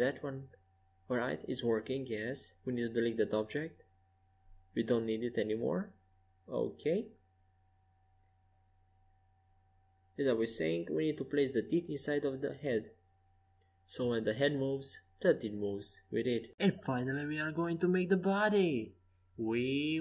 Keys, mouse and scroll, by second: 4.9 KP_Decimal, 5.8 x, 10.5-12.8 middle drag, 16.7-19.5 drag, 17.4 shift+a.